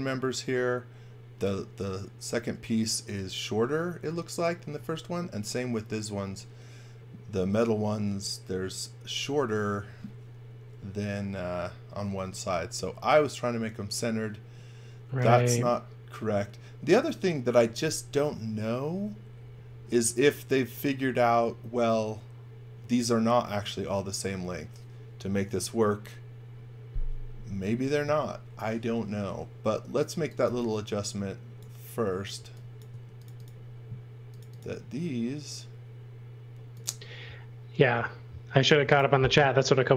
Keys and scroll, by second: 30.1 x, 30.4 v, 32.3 x, 32.8 space.